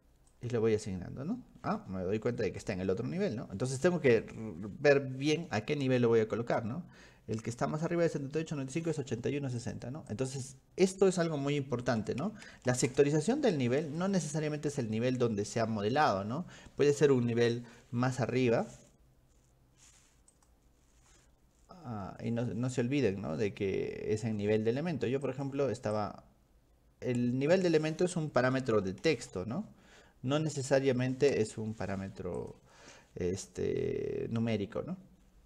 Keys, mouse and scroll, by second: 0.4 click, 2.7 click, 9.6 click, 10.1 click, 14.0 click, 20.4 click, 25.3 click, 26.0-27.9 drag, 32.4 click.